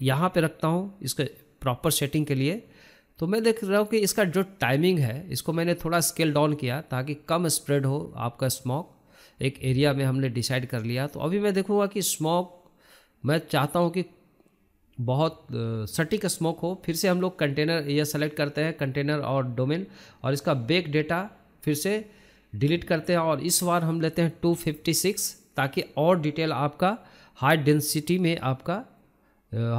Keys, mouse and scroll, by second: 1.1 alt+click, 1.7 middle click, 2.2 scroll up 3, 2.5-3.8 shift+middle drag, 3.8 click, 5.6 scroll down 1, 5.7-6.8 middle drag, 6.8-9.9 drag, 12.0-13.1 drag, 13.1 s, 14.7-15.9 drag, 17.0 scroll up 1, 17.2-17.8 scroll down 2, 18.0 click, 18.4 scroll down 1, 18.7 scroll up 1, 19.0-19.6 scroll down 2, 19.6-20.6 drag, 20.6-21.9 scroll up 5, 21.9-23.9 drag.